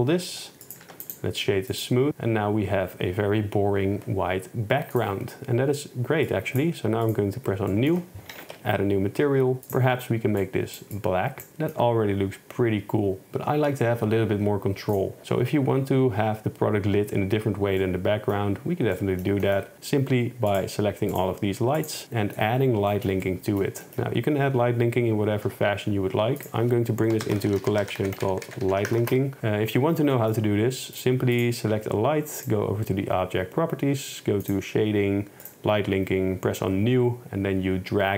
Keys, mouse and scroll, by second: 0.1 click, 0.9 Tab, 1.1 click, 2.1 KP_0, 6.3 click, 7.2 click, 7.7 middle click, 8.4 a, 8.5 KP_Decimal, 9.7 click, 15.0 click, 17.9 middle drag, 19.0 middle click, 20.6 click, 21.2 shift+click, 21.8 shift+click, 23.9 shift+click, 25.5 m, 29.1 Return, 30.2 shift+drag, 31.4 click, 34.5 click, 35.5 click.